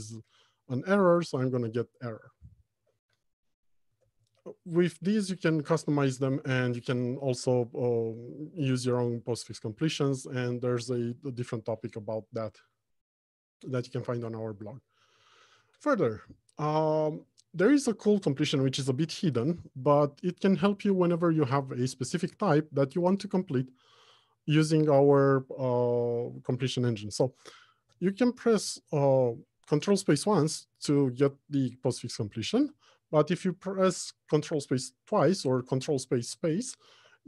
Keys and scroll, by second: 3.2 alt+Home, 3.6 Left, 4.3 Return, 28.2 ctrl+space, 32.7 ctrl+space.